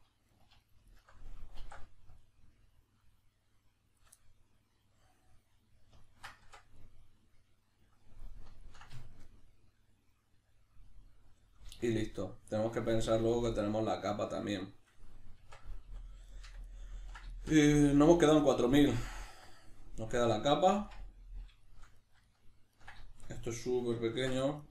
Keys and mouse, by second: 0.3 alt+right click, 0.6 alt+shift+right click, 0.9 alt+shift+right click, 1.6 alt+e, 4.0 shift+click, 4.2-24.7 middle drag, 6.4 Tab, 15.4 Tab, 24.1 ctrl+r.